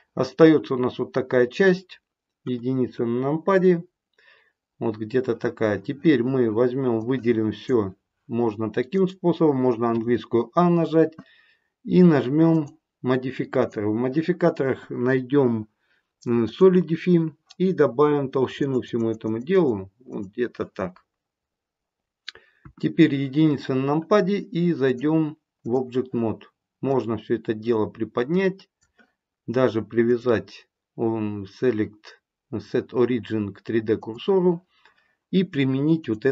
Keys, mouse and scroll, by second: 2.4 KP_1, 3.5 middle click, 4.3 middle click, 6.9 click, 8.8 click, 9.9 a, 12.4 click, 13.5 click, 18.4 click, 18.6 click, 19.1 click, 19.4 click, 22.5 KP_1, 24.9 click, 26.8 click, 36.0 click.